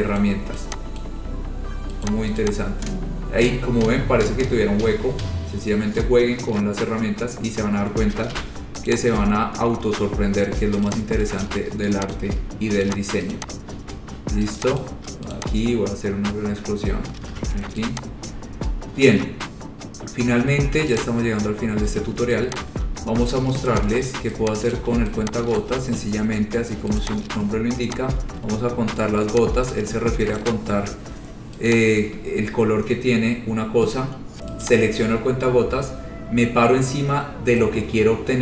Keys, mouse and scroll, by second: 0.4 click, 1.2 click, 2.3 click, 2.6 click, 2.8-3.7 scroll, 5.4-7.4 scroll, 8.5 p, 9.1 click, 9.4 scroll, 10.2-10.5 scroll, 11.1 click, 11.3 scroll, 12.4 shift+click, 13.1 click, 13.3 y, 13.5 click, 13.6 shift+click, 15.1 shift+click, 15.6 click, 15.8-17.4 scroll, 17.5 ctrl+z, 18.1 click, 19.1 scroll down 7, 20.3 scroll, 21.2 click, 21.4-22.0 scroll, 22.8 ctrl+click, 23.9 click, 24.2 scroll down 3, 25.0 shift+click, 25.0 shift+right click, 25.9 shift+right click, 25.9 shift+click, 27.3 right click, 28.1 click, 28.3 shift+click, 29.5 click, 30.6 click, 32.0 click, 32.5-33.3 scroll, 34.9 click.